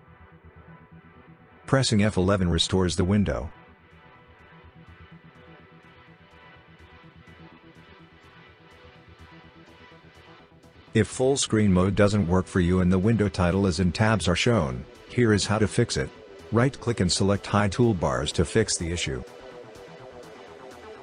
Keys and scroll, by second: 10.3 F11.